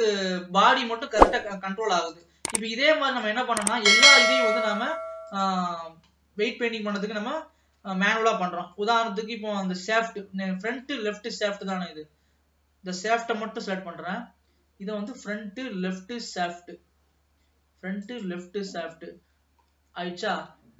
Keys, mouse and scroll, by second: 2.2 click, 3.2 click, 4.3-6.4 drag, 6.4 scroll up 1, 7.2 alt+a, 7.4-8.0 scroll up 2, 8.1 ctrl+s, 8.3-9.4 middle drag, 9.4-10.1 scroll up 1, 10.1-12.0 middle drag, 12.0 click, 13.6 l, 15.2 click, 18.1-19.7 drag, 19.7-20.5 scroll down 1, 20.5 alt+a.